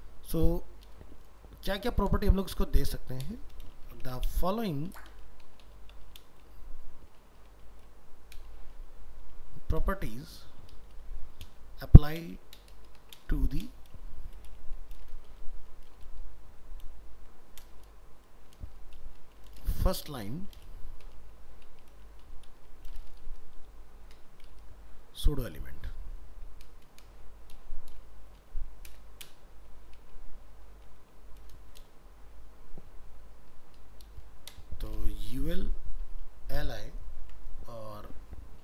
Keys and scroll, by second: 17.0 ctrl+space, 37.2 ctrl+s.